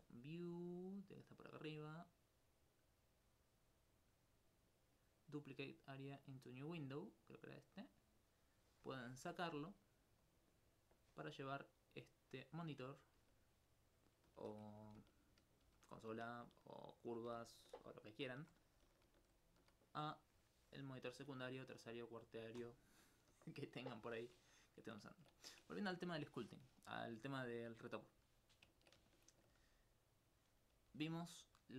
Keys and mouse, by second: 15.0 shift+F4, 15.7 shift+F5, 16.2 shift+F6, 18.1 F9, 18.9 F6, 19.2 F5, 20.2-21.4 drag, 23.7 middle click, 28.5 alt+click, 30.8 g.